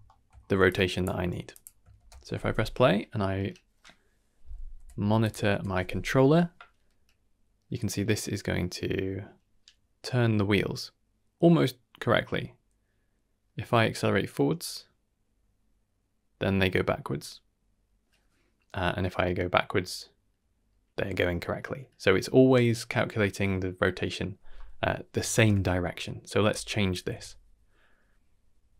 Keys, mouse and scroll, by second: 0.0 shift+middle click, 0.6 click, 1.1 g, 1.9 shift+space, 4.7 n, 5.2 click, 5.5 n, 25.3 shift+space, 25.8 scroll down 2, 26.0 middle click, 26.4 d, 26.9 d, 27.2-28.7 right drag, 27.2 d.